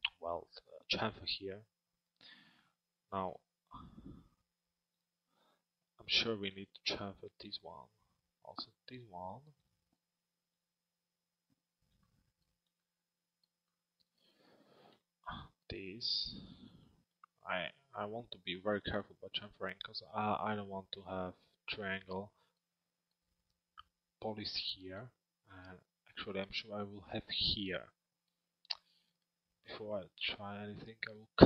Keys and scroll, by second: 17.1 z.